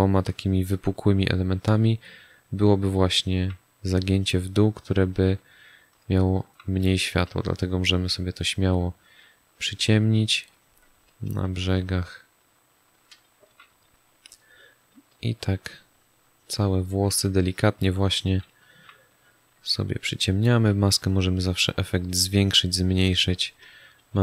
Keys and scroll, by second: 3.0 space, 5.0 ctrl+alt+z, 6.8 space, 13.1 space, 18.3 space, 23.8 space.